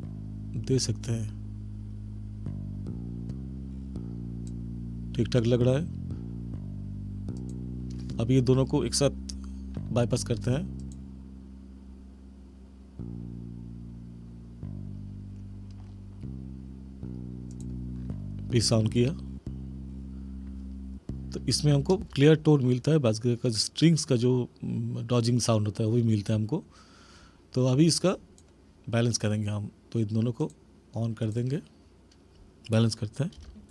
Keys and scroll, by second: 21.9 space, 33.3 space.